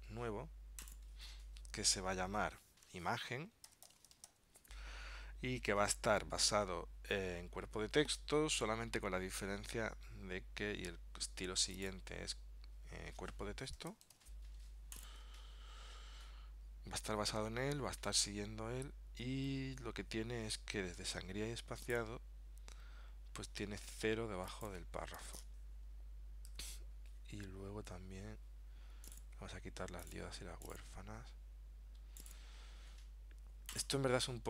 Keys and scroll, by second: 3.8 shift+Tab.